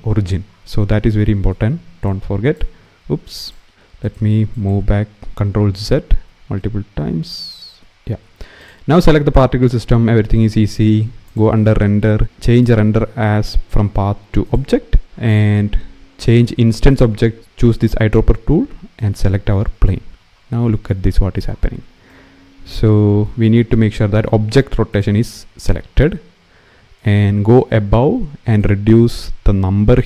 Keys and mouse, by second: 1.8 click, 2.6 ctrl+z, 3.2 click, 3.9 click, 4.3 click, 5.3 ctrl+z, 5.7 ctrl+z, 6.0 ctrl+z, 6.3 ctrl+z, 6.8 ctrl+z, 11.0 click, 12.5-14.3 drag, 16.7 click, 18.8 click, 28.4-29.7 drag.